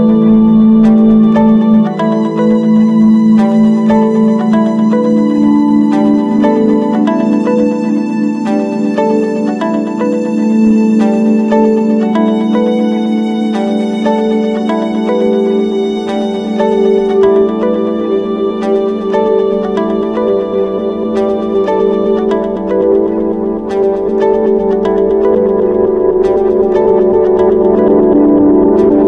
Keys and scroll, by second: 12.9 ctrl+=, 18.0 ctrl+z, 27.7 ctrl+z.